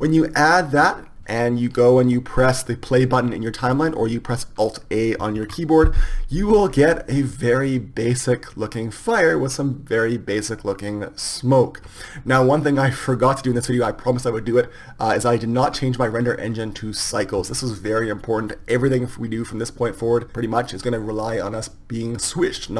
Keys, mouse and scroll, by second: 17.1 Escape.